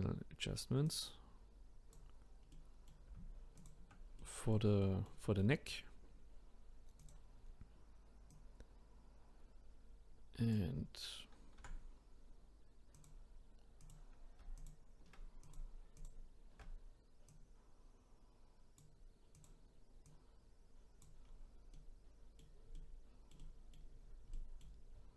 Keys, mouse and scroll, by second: 0.2-0.9 scroll up 2, 0.9 click, 2.5-3.6 middle drag, 3.6 shift+click, 4.2-7.0 middle drag, 7.0 click, 8.3 click, 11.6 r, 13.8 click, 15.4 click, 16.0-17.4 alt+drag, 19.4 click, 21.2-21.7 scroll down 1, 21.7-23.9 middle drag, 23.9-24.3 scroll up 1, 24.3 middle click.